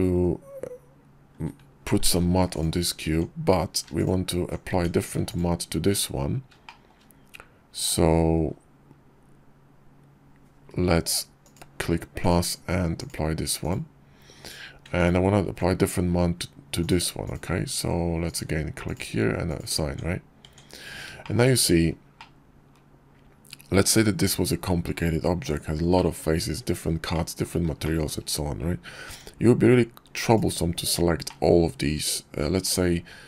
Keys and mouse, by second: 1.9 alt+m, 2.9 Tab, 4.5 Tab, 12.2 click, 14.9 alt+click, 16.6 click, 17.1 click, 18.2 click, 19.3 click, 19.7 Tab, 20.3 Tab, 21.1 shift+click, 21.7-22.0 middle drag, 22.0-23.8 drag, 25.8 click, 25.9 middle click, 27.0-27.3 middle drag, 27.7 shift+middle drag, 28.9 Tab, 30.1 click, 31.1 click, 31.9 middle click, 32.1 click.